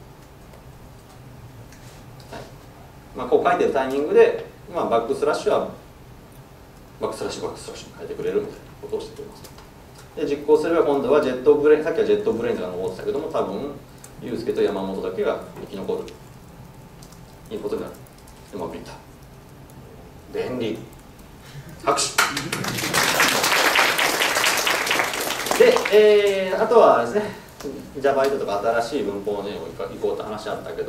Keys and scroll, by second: 15.1 ctrl+shift+F10.